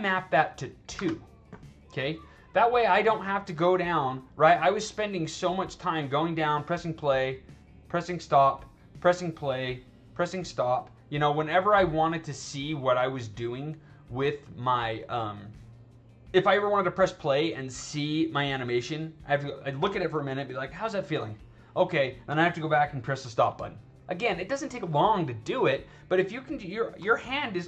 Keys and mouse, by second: 0.9 2, 3.0 click, 4.2 click, 8.2 click, 9.5 click, 10.5 click, 11.1 click, 11.5 click, 13.3 click, 16.8 click, 22.8 click.